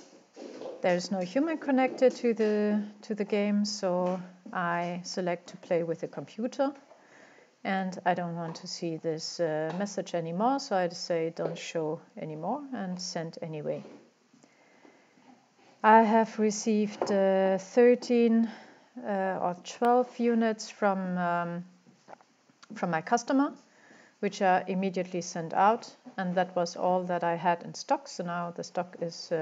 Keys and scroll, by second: 0.0-0.7 typing.